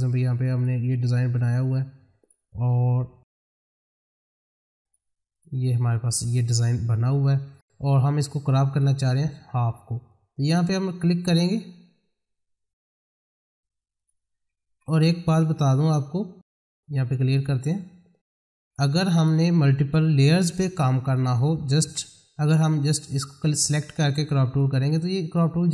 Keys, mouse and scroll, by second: 0.5 click, 1.2 middle click, 2.2 click, 3.4 right click, 4.8 click, 6.1 middle click, 8.7-13.0 drag, 13.0 right click, 13.9 click, 14.4 scroll down 1, 16.5 click, 21.8 F4, 22.6 click.